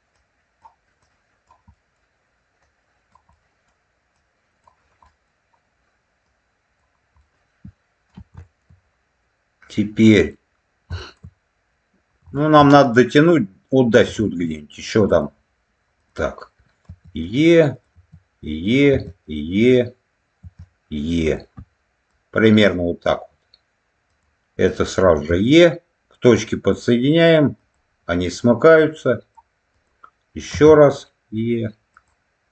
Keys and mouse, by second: 0.0 click, 0.9 click, 1.6 middle click, 2.5 click, 3.2 middle click, 4.9 middle click, 6.1 click, 7.1 middle click, 8.4 shift+middle click, 9.5 click, 10.9 shift+middle click, 12.2 shift+middle click, 14.1 shift+middle click, 15.0 click, 15.9 click, 16.8 e, 17.6 click, 17.8 e, 18.6 click, 19.4 click, 19.4 e, 20.3 e, 21.2 click, 22.0 click, 24.0 click, 25.1 e, 27.5 click, 28.7 click, 29.6 click, 30.4 e, 31.8 click.